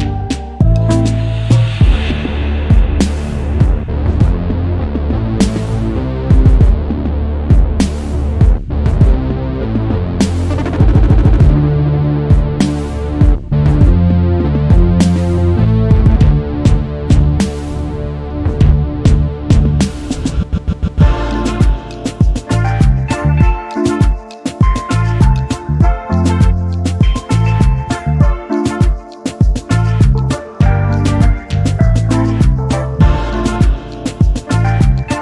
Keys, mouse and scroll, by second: 0.2 Down, 2.9 click, 3.6 shift+click, 5.3 click, 6.1 click, 7.3 click, 8.4 KP_2, 8.5 KP_0, 8.8 KP_Enter, 10.7 click, 11.4 click, 13.0 Down, 15.5 Up, 17.7 click, 18.8 Down, 20.7 Up, 22.0 click, 23.4 ctrl+d, 24.9 click, 25.7 KP_2, 25.9 KP_0, 26.1 KP_Enter, 27.7 click, 28.4 shift+click, 30.9 click, 31.8 Down, 34.8 click.